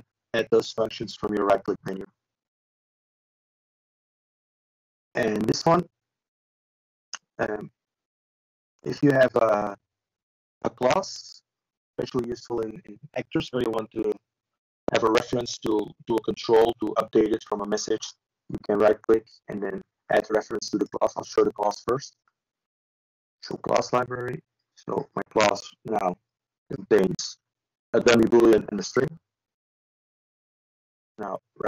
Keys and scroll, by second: 20.8 typing.